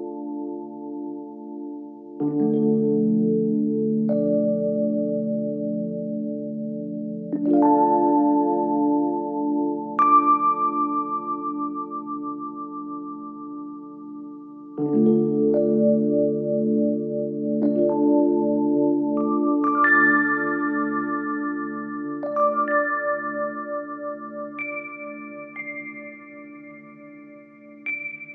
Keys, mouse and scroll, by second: 0.7 click, 0.9 click, 1.1 click, 1.3 scroll down 4, 1.5-1.9 scroll up 10, 2.4 click, 3.4 click, 3.8 g, 4.6 click, 4.8-5.1 scroll down 3, 6.0 click, 6.4 s, 6.9 click, 7.7 click, 7.9 scroll up 3, 8.2 click, 8.5-9.1 scroll down 4, 9.4 click, 9.8 click, 10.0 click, 10.2 shift+click, 11.5 click, 11.6-12.3 scroll up 2, 11.8 click, 12.3 click, 12.8 scroll down 2, 13.2 click, 14.3 shift+click, 14.5 shift+click, 15.1 click, 15.4 click, 15.6 click, 16.0 click, 16.3 click, 16.9 shift+click, 17.9 shift+d, 20.4 click, 20.7-21.2 scroll down 5, 21.2 click, 21.7-22.1 scroll down 2, 22.1 click, 22.6 scroll up 2, 22.9 shift+click, 23.4 g, 24.5-25.1 scroll down 5, 25.1 click, 25.5 click, 26.7 shift+click, 27.3 scroll up 2, 27.5-27.8 scroll down 7, 27.8-28.3 scroll up 11.